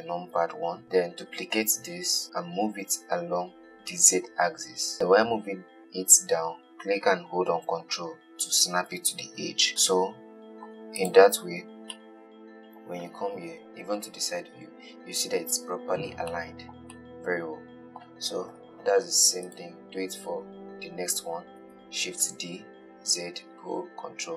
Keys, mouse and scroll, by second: 1.6 shift+d, 10.0-11.3 middle drag, 11.3 click, 11.7-12.2 scroll up 1, 12.2-13.9 middle drag, 13.9 KP_3, 16.6-18.7 shift+middle drag, 18.7 KP_1, 19.7 click, 21.9 shift+d.